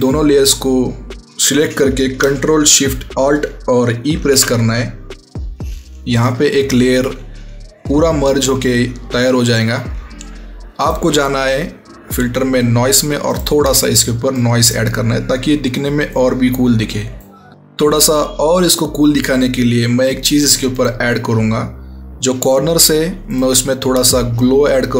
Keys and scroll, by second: 4.0 ctrl+alt+shift+e.